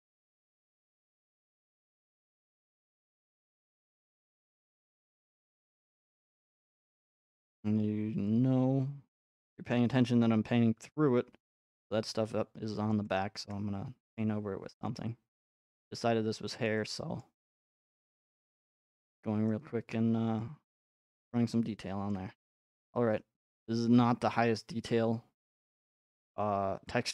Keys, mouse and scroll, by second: 0.2-1.4 drag, 2.8 x, 3.9 click, 4.4 x, 5.5 click, 8.3 click, 12.9 middle click, 13.5 middle click, 14.2 click, 14.6 f, 17.2 middle click, 18.1 click, 18.4 middle click, 19.1 middle click, 19.9 middle click, 22.1 middle click, 22.3 middle click, 22.3 middle click, 23.1-24.1 scroll, 24.1-25.3 scroll, 26.2 shift+middle click.